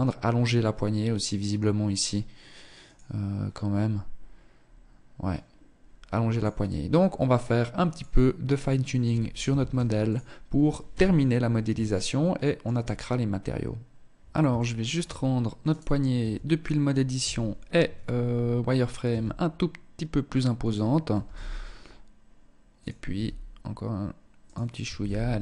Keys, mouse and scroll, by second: 8.1 click, 8.7 ctrl+s, 10.0 KP_1, 11.0 shift+middle click, 13.7 shift+middle click, 14.3 scroll up 3, 14.9 right click, 15.5 Tab, 16.3 z, 17.4-17.8 scroll up 2, 18.2 s, 20.2 g, 22.2 s, 24.0 g, 25.2 Tab.